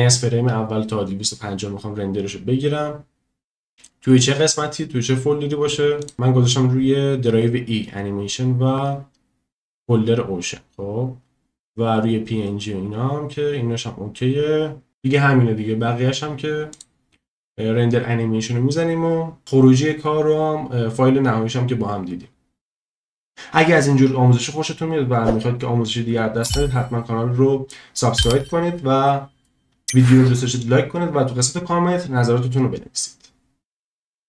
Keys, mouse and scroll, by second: 6.0 click, 16.7-22.1 drag.